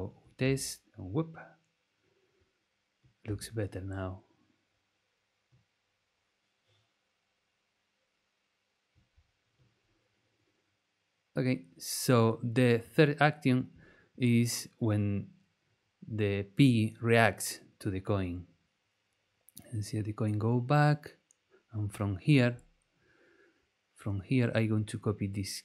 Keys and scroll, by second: 0.4 space, 3.2 space.